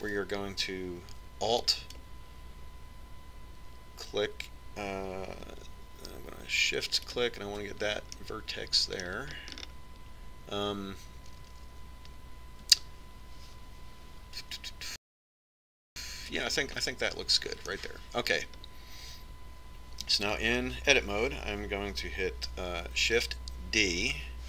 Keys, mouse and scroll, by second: 0.7 Tab, 3.5-10.1 right drag, 10.1-11.1 middle drag, 11.1-11.7 scroll down 1, 11.7-13.4 scroll up 1, 13.4 scroll up 1, 17.6-20.5 middle drag.